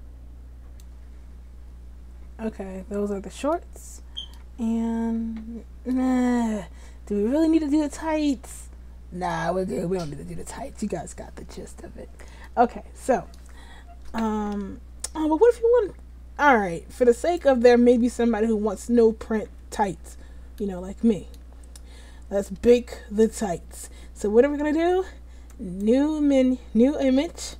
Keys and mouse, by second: 0.9 Tab, 3.8-6.4 drag, 6.4-8.0 middle drag, 11.0-16.5 middle drag, 17.3 click, 18.1 Tab, 18.7 a.